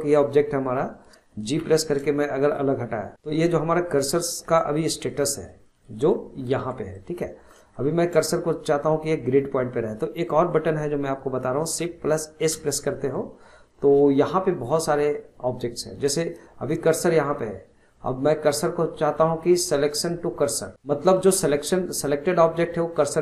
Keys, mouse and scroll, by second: 1.6 g, 2.7-3.1 scroll down 2, 3.1 scroll up 4, 3.4 scroll down 1, 5.1-5.7 middle drag, 6.1 alt+middle click, 6.9-10.8 middle drag, 12.4 shift+s.